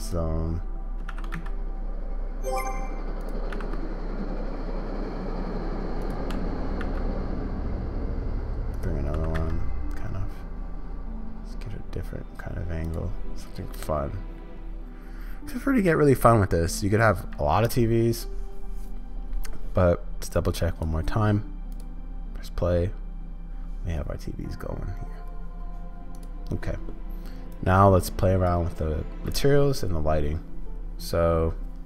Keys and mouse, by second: 1.1 shift+d, 3.4 r, 6.3 g, 9.1 r, 20.8 click, 20.8-31.8 middle drag.